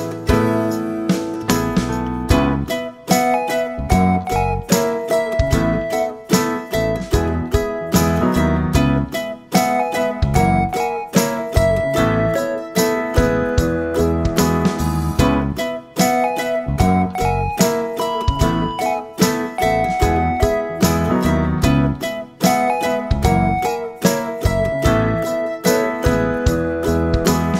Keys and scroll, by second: 5.9 Delete, 9.9 3, 10.4 Return.